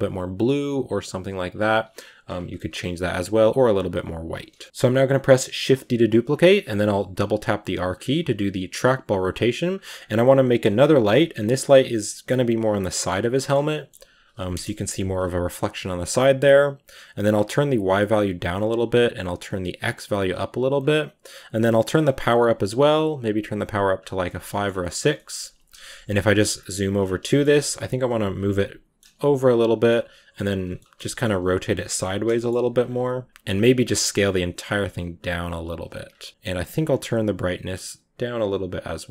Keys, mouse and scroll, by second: 2.4-3.8 shift+middle drag, 3.8 click, 4.4-5.3 scroll down 5, 5.3 scroll down 2, 5.4 shift+d, 6.5 r, 7.9 r, 9.3 r, 9.6 g, 10.1-10.6 middle drag, 10.6-11.0 scroll up 1, 11.0-11.3 middle drag, 11.3 g, 11.7 middle click, 12.2 g, 13.2 middle click, 13.8 g, 14.4 KP_0, 15.0 scroll up 1, 17.2-24.1 drag, 24.1 middle click, 24.6 scroll up 2, 24.7-25.7 shift+middle drag, 25.7 KP_Decimal, 26.4-27.1 scroll down 10, 27.1-27.8 shift+middle drag, 27.8 g, 28.3 middle click, 29.0 g, 29.7 middle click, 30.5 scroll up 2, 30.6-31.3 shift+middle drag, 31.3 r, 31.8 middle click, 32.5 r, 32.8 g, 33.7 s, 34.6 g, 36.5-39.1 drag.